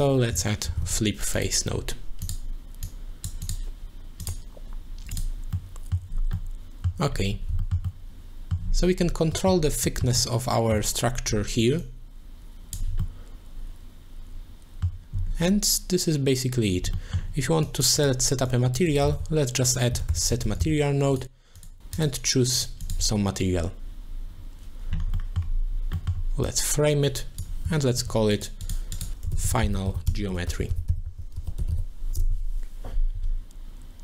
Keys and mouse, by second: 3.1 click, 3.4 click, 5.3 middle click, 5.5 middle click, 6.4 middle click, 7.6 shift+middle click, 7.9 middle click, 9.3 middle click, 9.9 shift+middle click, 10.2 middle click, 11.9 shift+click, 13.0-14.9 middle drag, 16.9 middle click, 17.7 click, 18.5 click, 18.9 click, 19.4 shift+a, 22.0 click, 22.8 click, 25.3 middle click, 25.9 middle click, 26.5 click, 28.0 ctrl+j, 28.3 click, 28.6 click, 28.9 click.